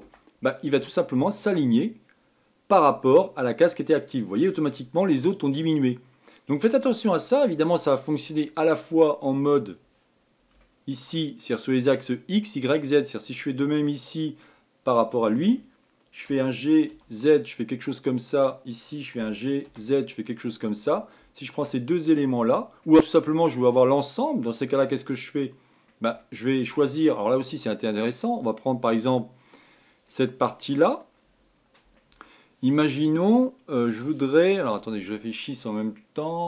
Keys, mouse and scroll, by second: 1.4-8.4 middle drag, 10.8-15.2 shift+middle drag, 15.2 click, 16.5 g, 18.6 click, 19.4 g, 21.7 shift+click, 23.0-27.8 middle drag, 27.8 click, 30.2 click, 32.2-35.3 middle drag.